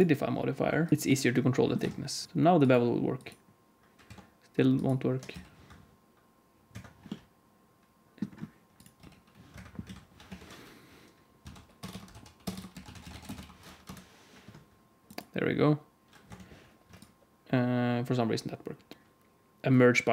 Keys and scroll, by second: 0.9 Tab, 0.9 alt+z, 0.9 alt+a, 0.9 s, 1.7 Tab, 2.2 x, 4.0 Tab, 5.2 g, 8.9 g, 9.8 a, 10.2 F3, 11.8 BackSpace, 12.4 BackSpace, 16.2 Tab.